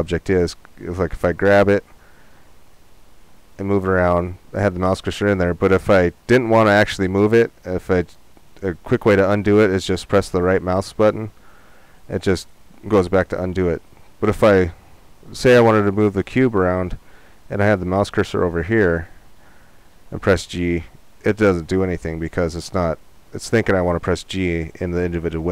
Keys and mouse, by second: 1.1 g, 19.9 g.